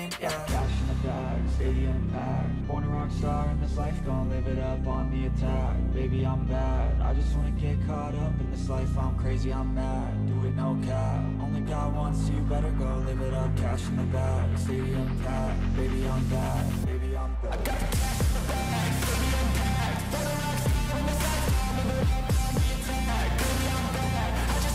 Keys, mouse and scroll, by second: 6.1-7.6 scroll up 10, 13.7-14.8 scroll up 14, 14.8-16.0 scroll down 12, 16.2-16.8 scroll down 9, 16.8-19.2 scroll down 1, 19.2 scroll, 19.4 ctrl+-, 19.8 ctrl+-, 21.1 ctrl+=, 22.5-23.2 scroll up 11.